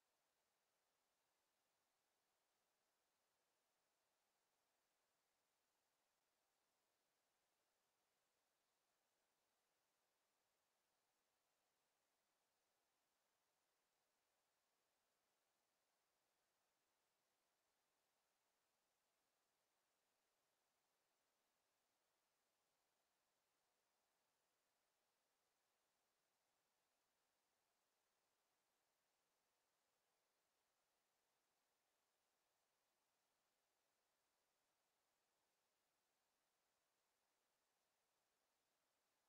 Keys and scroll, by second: 30.9 e, 37.7 ctrl+z.